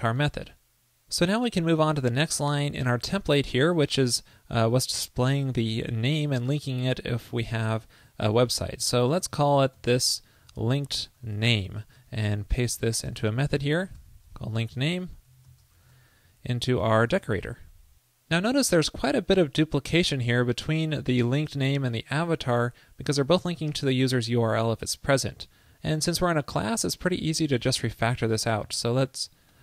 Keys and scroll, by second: 7.4 super+x, 11.8 super+s, 12.1 alt+super+Left, 16.0 super+v, 17.2 super+s, 28.7 super+c.